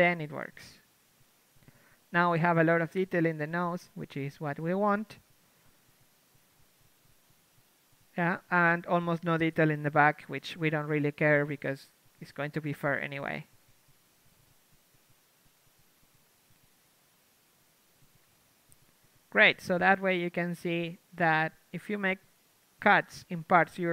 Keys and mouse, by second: 0.9 Tab, 2.2 shift+space, 9.9 KP_3, 11.2 ctrl+e, 11.2 click, 11.4 ctrl+e, 12.5 a, 12.9 ctrl+Tab, 14.2 click, 18.2 ctrl+Tab, 19.4 l, 20.1 u, 21.4 shift+space, 22.2 a, 22.5 a.